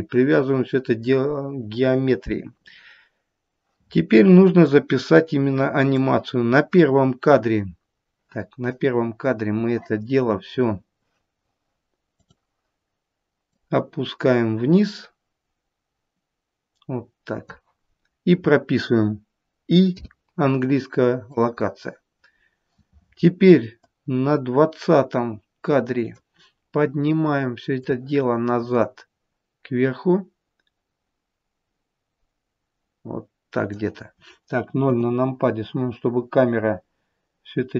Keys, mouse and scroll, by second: 4.6 click, 7.6 scroll down 2, 12.1 click, 13.4 click, 19.8 i, 23.8 click, 27.8 click, 34.8 KP_0.